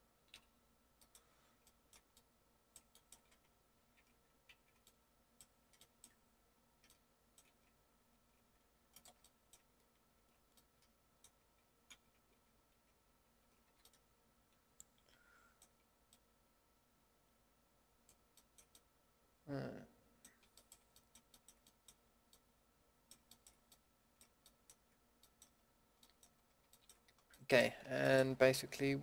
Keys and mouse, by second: 0.3 KP_Decimal, 1.8-2.1 middle drag, 3.8 ctrl+x, 4.5 ctrl+z, 5.0 middle click, 5.1 middle drag, 8.1 ctrl+x, 9.2 middle click, 9.3 middle click, 10.1 ctrl+x, 12.3 ctrl+z, 12.7 ctrl+z, 13.2 ctrl+z, 13.6 a, 18.3-18.7 middle drag, 20.1 middle drag, 21.0-23.3 middle drag, 23.4 middle drag, 24.2-24.6 middle drag, 26.0-29.0 middle drag.